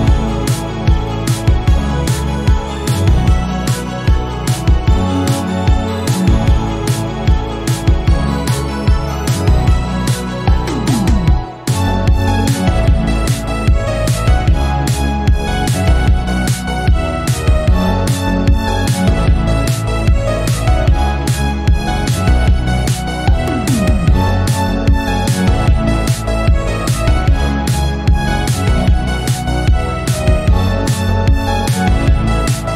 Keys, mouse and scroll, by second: 0.4 e, 4.6 shift+middle click, 4.9 scroll up 1, 5.4 s, 7.2 scroll down 1, 7.4 shift+middle click, 7.8-8.3 scroll down 1, 8.3 e, 10.0 s, 11.2 shift+middle click, 11.6 e, 13.0-13.4 scroll up 1, 13.4 shift+middle click, 13.9 s, 16.0 click, 16.6 ctrl+r, 17.9 s, 19.7-20.8 drag, 20.8 ctrl+r, 21.6 s, 22.6-23.7 scroll down 10, 23.3 alt+z, 23.7-25.5 shift+middle drag, 26.9 KP_1, 27.2 scroll up 3, 27.9 shift+middle click, 28.8 Tab, 29.0 scroll down 1, 29.4 click, 29.6-32.4 drag.